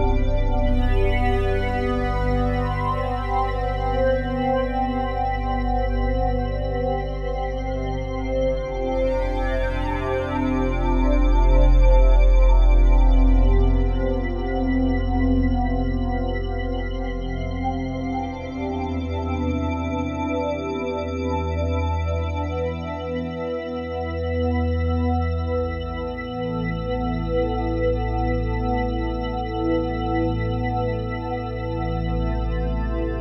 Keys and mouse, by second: 2.9 shift+space, 3.9-4.8 drag, 5.0-6.3 drag, 6.6 typing, 7.5-8.3 drag, 8.3 ctrl+s, 9.9-13.2 drag, 13.6-15.5 drag, 15.5 i, 16.5 click, 17.9 click, 19.6 click, 20.2 click, 21.1 click, 21.8 click, 22.9 Left, 23.1 Left, 23.2 Left, 23.7 Left, 25.1 i, 25.9-27.7 drag, 28.7 click, 29.7 click.